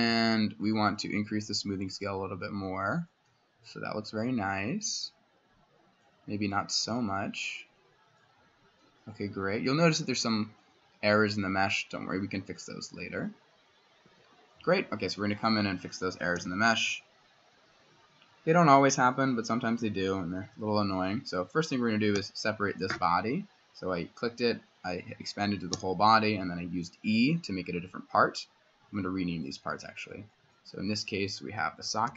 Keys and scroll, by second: 14.0 Escape, 16.4 c, 20.4 s, 22.2 e, 25.7 y, 31.6-32.1 typing.